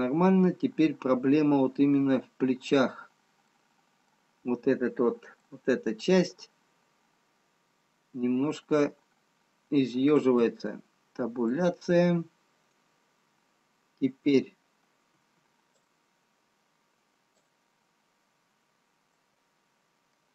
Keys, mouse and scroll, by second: 0.4 middle click, 4.0 middle click, 4.0-5.0 scroll up 2, 6.0 middle click, 9.0-10.3 scroll down 2, 10.3 Tab, 12.0 middle click, 15.2 b, 19.4 middle click.